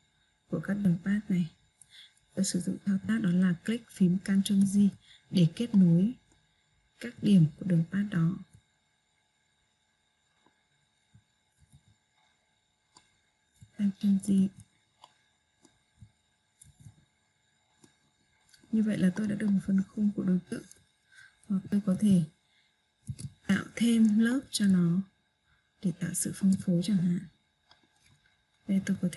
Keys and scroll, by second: 4.0 ctrl+j.